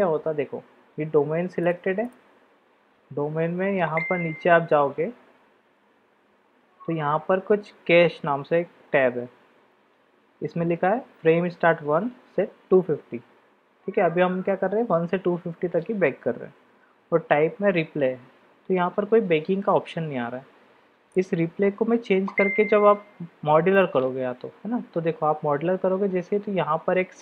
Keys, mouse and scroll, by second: 1.6 click, 21.2-23.9 drag.